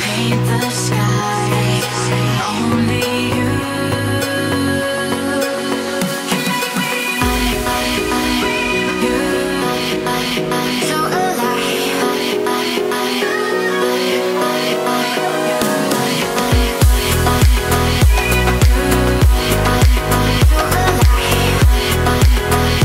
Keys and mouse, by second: 1.2-1.7 middle drag, 2.0 KP_7, 4.3 s, 6.1-6.7 middle drag, 7.0-9.2 typing, 9.4 KP_Enter, 10.2-10.6 middle drag, 10.8-11.1 shift+middle drag, 11.3 middle click, 13.4 Tab, 13.9 1, 17.0 f, 18.3 i.